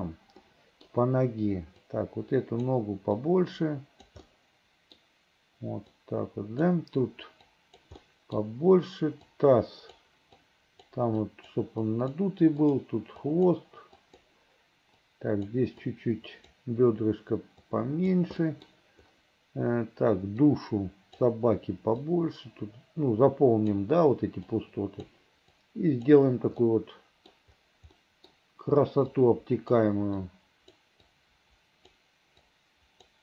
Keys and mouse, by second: 0.5 middle click, 1.9 right click, 3.3-4.3 right drag, 4.4 middle click, 6.1 right click, 7.6 right click, 8.1 middle click, 9.4 right click, 10.5 click, 11.4 click, 11.9 click, 12.7 click, 13.3 click, 14.1 click, 15.9 click, 17.7 right click, 18.5 click, 20.5 right click, 22.1-23.9 right drag, 24.6 right click, 25.7 right click, 26.7 middle click, 28.1 middle click, 29.2 click, 30.3 click, 31.2 click, 32.6 click.